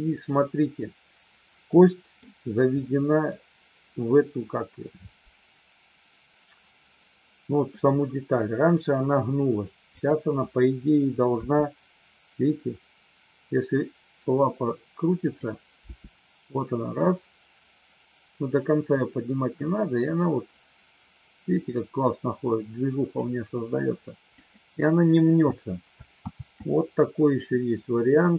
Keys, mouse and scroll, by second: 0.8-2.2 middle drag, 2.8 middle click, 11.3 r, 16.0 g, 24.3 click, 26.2 ctrl+z, 28.2 shift+middle click.